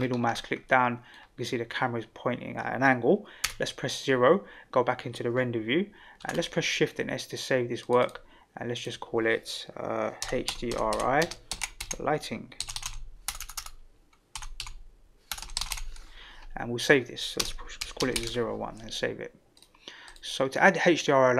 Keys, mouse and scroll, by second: 0.6-1.1 middle drag, 3.4 KP_0, 6.3 ctrl+s.